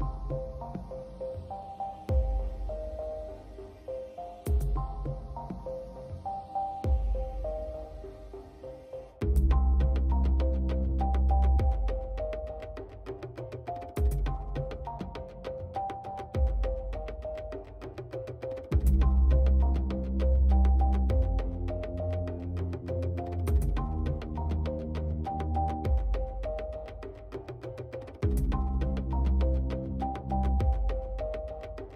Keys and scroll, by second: 6.6 space, 16.9 space, 18.7 space, 20.8 ctrl+alt+z, 24.6 space, 26.0 space, 30.4 space.